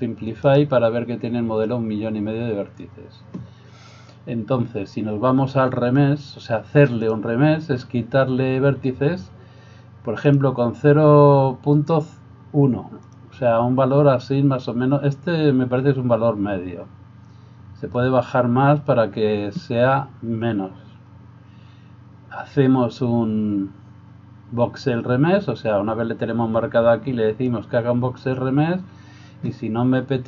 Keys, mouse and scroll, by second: 0.4 right click, 7.0 click, 10.3-13.8 drag, 27.5-30.2 drag.